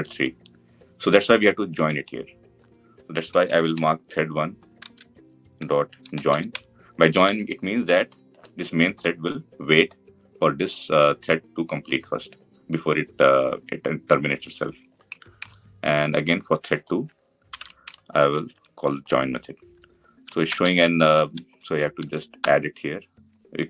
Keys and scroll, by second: 4.6 Return, 15.2 ctrl+d, 20.3 alt+Return.